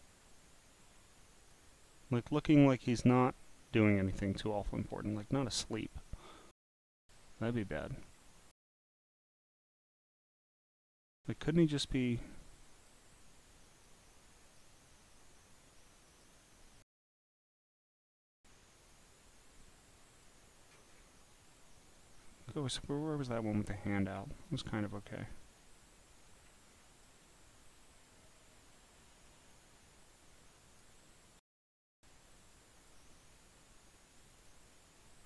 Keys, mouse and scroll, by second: 1.4 click, 2.2 click, 4.0 click, 4.9 click, 7.4-8.2 scroll down 10, 9.3 scroll up 4, 10.3 click, 12.0 click, 12.8 click, 13.2 click, 14.5 click, 16.1 click, 17.5 click, 18.7-20.3 drag, 20.8 scroll down 1, 22.3 scroll down 3, 22.9 scroll up 2, 24.4 click, 24.9 click, 25.5 click, 26.7 scroll down 4, 27.0-30.8 drag, 31.4 click, 32.3 click, 34.3 click.